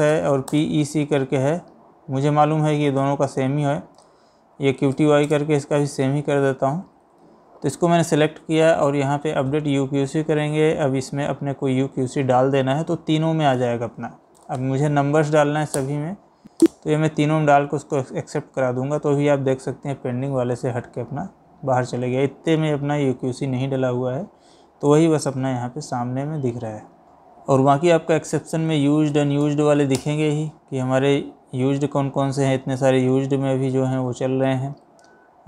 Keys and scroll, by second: 0.2 Down, 0.5 space, 2.7 Down, 3.5 Up, 4.2 Down, 5.0 Up, 5.3 space, 6.9 Up, 26.8 Escape, 29.2 Down, 29.5 Up.